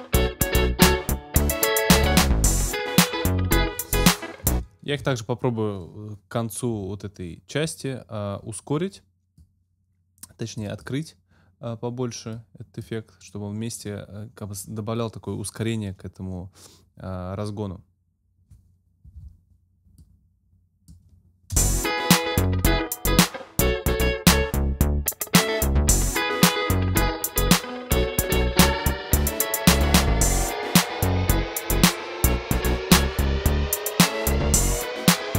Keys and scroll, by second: 4.5 space, 5.1 Return, 21.6 space.